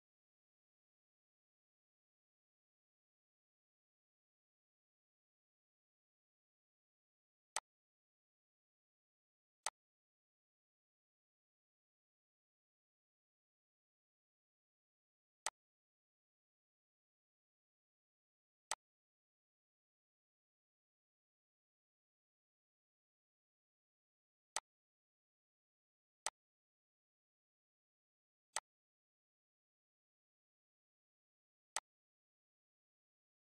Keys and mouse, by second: 7.8 click, 10.4 click, 12.6 click, 15.0 click, 16.6 ctrl+d, 18.7 click, 20.3 click, 22.0 Delete, 22.3 click, 22.5 Delete, 23.0 click, 23.4 Delete, 24.0 click, 25.4 click, 26.6 click, 28.0 click, 31.5 click.